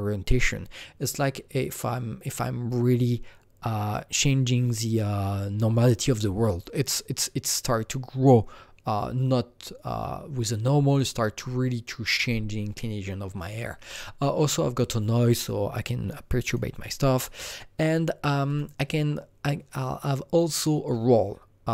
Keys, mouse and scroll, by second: 16.4 click, 17.2-18.4 drag, 18.4 click.